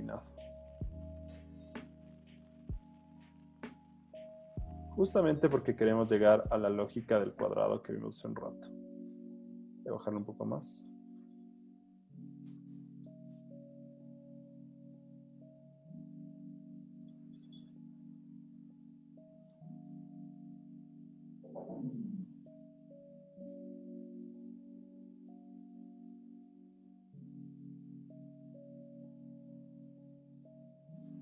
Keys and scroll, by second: 7.0 super+z, 12.0 super+z, 17.4 super+z, 19.3 z, 21.3 b, 22.7 alt+super+z, 23.1 alt+super+z, 25.8 super+z, 29.9 super+z.